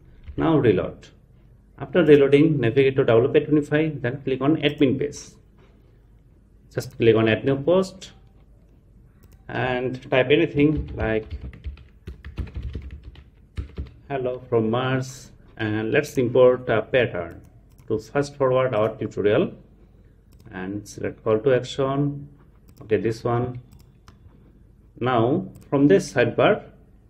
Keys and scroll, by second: 0.3 super+r.